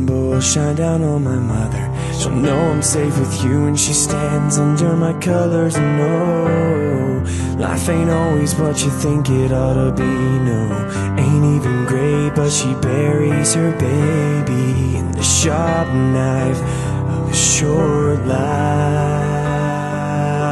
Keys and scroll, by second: 7.4 ctrl+z.